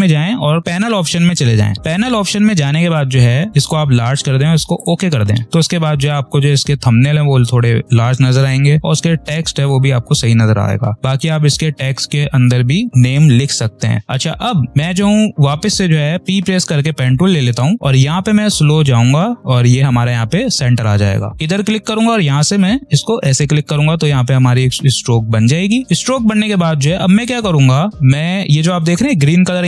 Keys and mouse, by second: 0.9 click, 3.6 click, 21.3 click, 23.1 shift+click, 25.8 v, 25.8-29.6 drag.